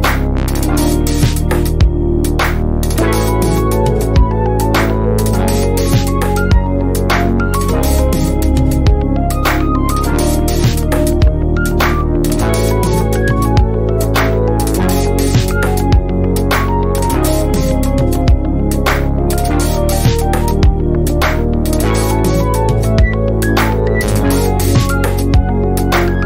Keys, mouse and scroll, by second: 0.3 ctrl+space, 0.6 click, 1.0 ctrl+scroll down 1, 1.5 click, 1.8 ctrl+scroll up 1, 2.3 click, 2.7 F2, 3.3-4.6 click, 4.6 ctrl+scroll up 1, 4.9 F1, 5.5-6.1 click, 6.7 ctrl+scroll up 1, 7.8-8.7 ctrl+drag, 10.4 ctrl+scroll down 1, 11.9-13.8 drag, 13.8 ctrl+scroll down 1, 14.2 shift+right click, 16.2 click, 18.2-18.7 ctrl+scroll up 2, 18.7 F1, 19.3-20.0 click, 20.0 F1, 20.6-21.8 click, 21.8 shift+right click, 22.9 ctrl+scroll down 1, 23.6 F1, 24.4 click, 24.8 F2, 25.2 shift+right click, 25.4-26.2 typing, 26.1-26.2 click.